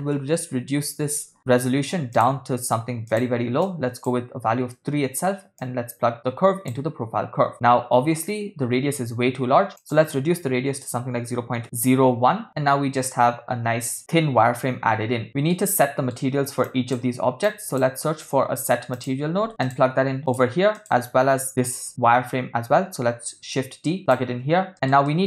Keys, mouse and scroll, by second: 3.6 click, 5.6-6.8 drag, 9.8-11.9 drag, 15.2 ctrl+middle click, 15.8 middle click, 16.7 click, 17.5 click, 18.2 shift+a, 20.8 click, 23.4 shift+d, 24.7 ctrl+middle click, 25.1 middle click.